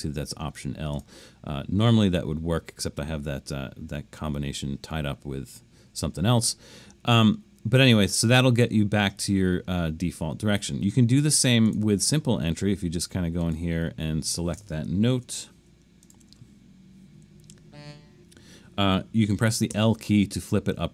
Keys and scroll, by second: 15.1 super+z, 19.7 i.